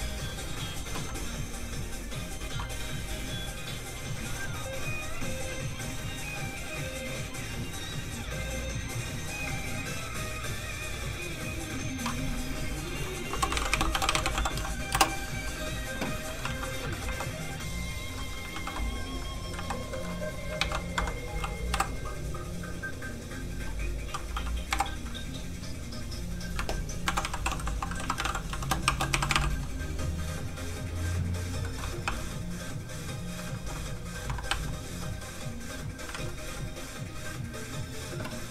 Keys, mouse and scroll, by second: 0.0-1.9 scroll up 1, 1.9 click, 13.3-14.3 typing, 14.9 Return, 16.3 middle click, 16.5 alt+shift+z, 16.7 scroll down 1, 16.9 middle click, 17.0 3, 17.8 click, 18.5 shift+d, 19.4 d, 19.5 x, 19.6 click, 19.9 shift+middle click, 20.3 middle click, 20.7 shift+d, 20.9 Escape, 21.7 m, 22.5 click, 24.7 m, 25.7 click, 27.0-28.8 typing, 30.7 click, 31.0 click, 31.6 middle click, 32.0 3, 33.6 2, 34.2 1, 34.5 4, 35.3 click, 36.1 alt+shift+z, 36.9 click.